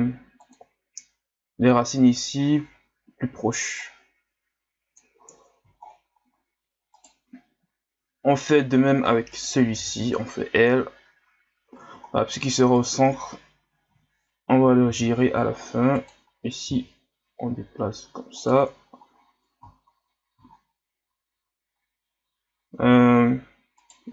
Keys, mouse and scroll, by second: 3.8-5.8 drag, 5.8-6.3 scroll down 10, 6.9 right click, 9.3 right click, 9.8 l, 12.1 scroll down 3, 12.7 right click, 13.9 l, 14.9 r, 16.6 g, 19.0 scroll down 4, 20.0-20.6 scroll up 8, 23.8 right click.